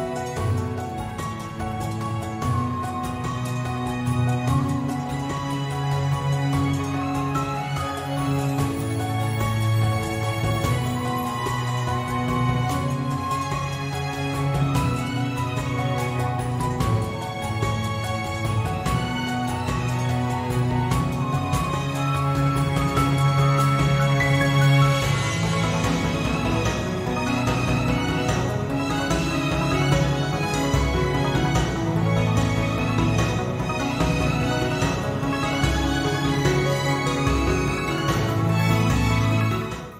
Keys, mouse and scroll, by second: 6.1 shift+F5, 7.8 click, 9.2 shift+F6, 12.1-14.4 drag, 19.6 shift+F5, 22.4 space, 26.0-33.0 middle drag, 35.2 space.